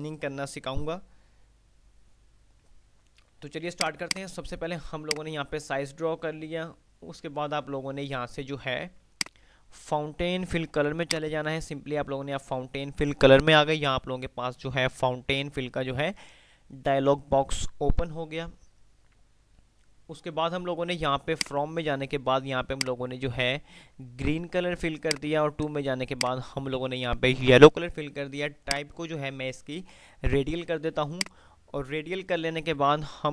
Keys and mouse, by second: 2.8 F3, 3.9 click, 4.8 F2, 5.3-6.4 F2, 5.3 click, 9.3 click, 21.4 click, 25.3 click, 31.3 click.